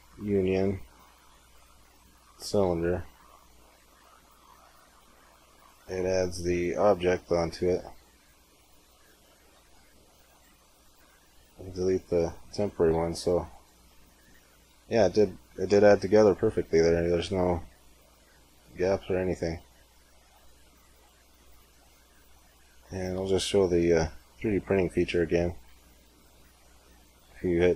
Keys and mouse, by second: 2.9 z, 3.7-5.3 middle drag, 8.4 click, 9.0 z, 10.9 x, 12.7 g, 15.0 z, 19.2 middle click, 19.5 middle click, 20.1 Tab, 24.9 click, 25.6 Tab, 26.5 Tab, 27.1 Tab.